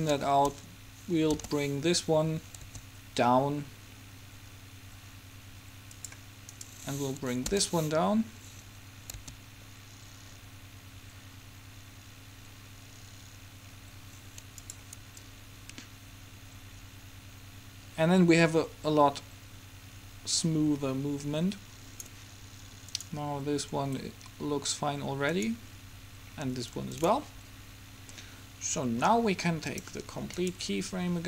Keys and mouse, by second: 1.5 g, 6.7-8.6 right drag, 7.7 g, 15.3-17.0 drag, 23.1-25.0 drag, 25.5-28.7 drag, 29.7-31.2 drag, 30.5-31.2 right drag.